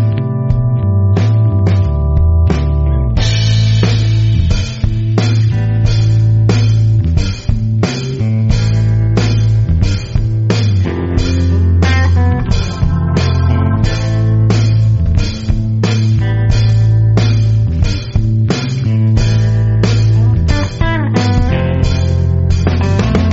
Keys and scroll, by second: 5.0 2, 8.9 super+z, 17.7 5, 22.1 super+z.